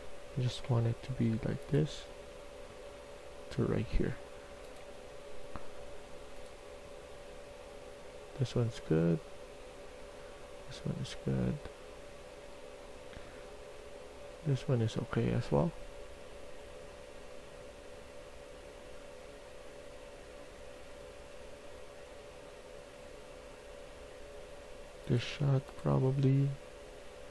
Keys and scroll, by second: 1.8 w, 2.0 w.